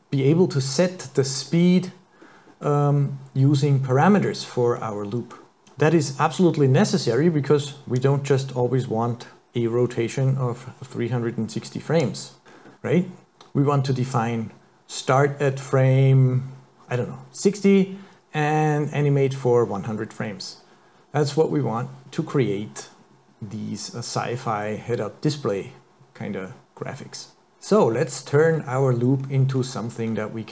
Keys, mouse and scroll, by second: 1.4 scroll down 4, 2.3-2.7 scroll up 3, 4.8 middle click, 8.0 click, 12.6-13.5 scroll down 4, 28.5-29.2 scroll up 4, 29.2-30.1 scroll down 6, 30.1-30.5 scroll up 2.